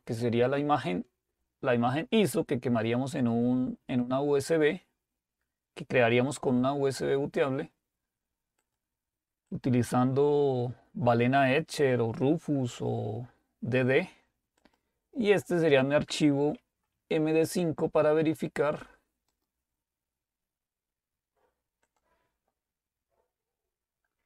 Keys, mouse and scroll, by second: 8.6-10.4 drag, 14.7 click, 19.3 right click, 21.9 click.